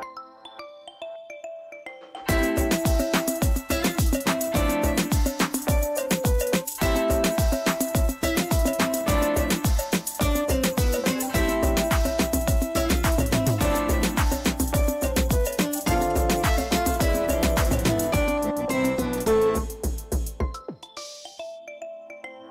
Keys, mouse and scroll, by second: 20.9 click.